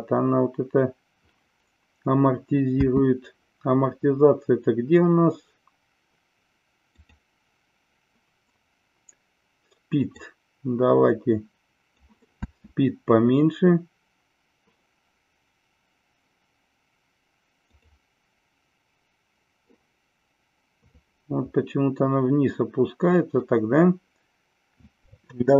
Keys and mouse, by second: 2.7 space, 6.9 click, 10.1-12.0 drag, 12.4 space, 17.7 click, 24.7 space.